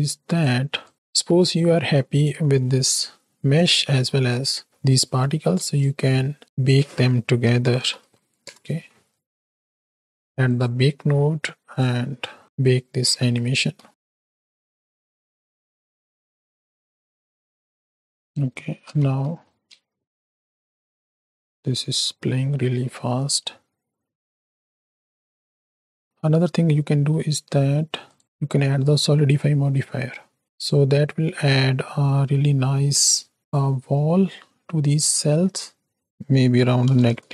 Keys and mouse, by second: 0.0 click, 0.8 click, 1.2 middle click, 2.5 middle drag, 4.7 middle click, 5.6 shift+a, 11.7 drag, 13.6 z, 13.9 click, 18.3 space, 18.7 space, 19.0 z, 19.7 space, 23.1 space, 23.5 space, 26.7 middle click, 28.0 click, 28.4-28.9 middle drag, 29.7-30.1 middle drag, 30.6-33.5 drag, 34.0 middle click, 35.0 shift+middle click, 36.0-37.3 drag.